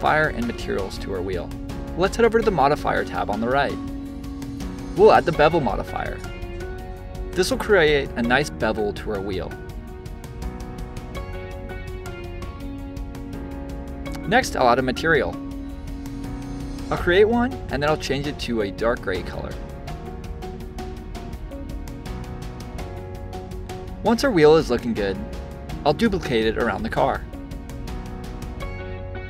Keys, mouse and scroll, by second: 2.8 click, 5.5-6.6 drag, 6.8-9.9 middle drag, 10.1 click, 12.3 click, 14.1-15.8 drag, 20.6 click, 21.1-23.1 middle drag, 23.1 click, 24.7 c, 25.3 v, 26.4 click, 28.5 click, 29.1 click.